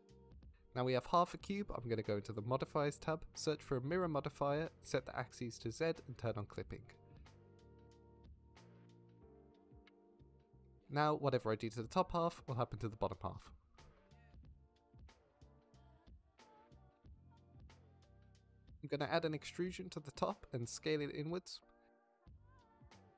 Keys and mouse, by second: 0.6 Tab, 1.4 middle drag, 12.5 Tab, 12.8 middle click, 13.3 3, 13.6 click, 13.9 shift+click, 14.9 g, 15.3 z, 18.1 click, 18.9 e, 20.4 click, 20.8 s, 22.4 click, 22.8 middle click.